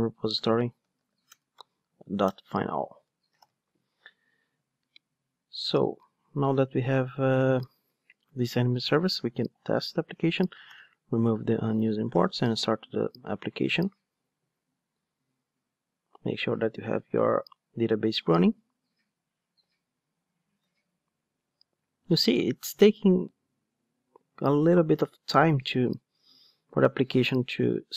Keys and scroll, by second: 1.3 Return, 3.4 alt+super+l, 5.8 ctrl+Tab, 10.6 ctrl+alt+o, 12.3 ctrl+d.